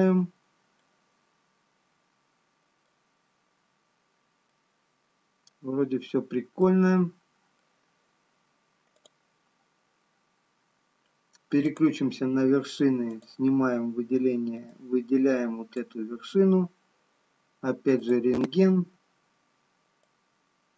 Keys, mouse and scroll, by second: 1.1 middle click, 7.4 middle click, 7.4 scroll down 4, 10.1 click, 12.0 click, 13.5 click, 18.8 click, 18.8 scroll up 2, 20.4 click.